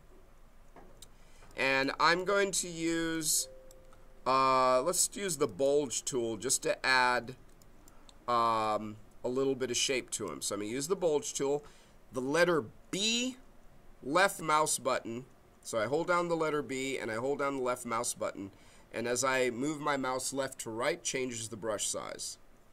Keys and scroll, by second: 14.3 b.